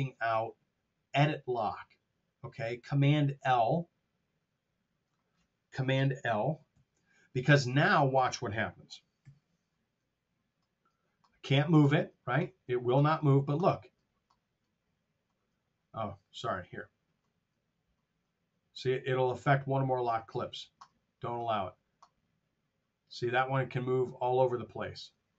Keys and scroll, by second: 6.6 super+l, 9.2 F8.